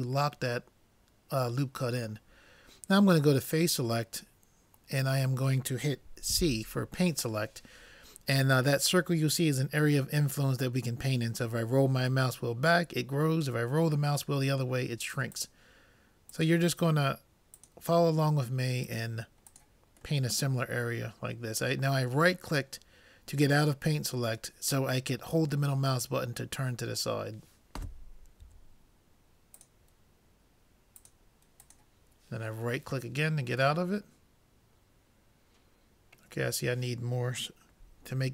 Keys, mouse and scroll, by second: 3.5-5.2 drag, 6.3 c, 20.3-22.0 middle drag, 25.7-27.3 middle drag, 28.5 c, 32.9-34.7 middle drag.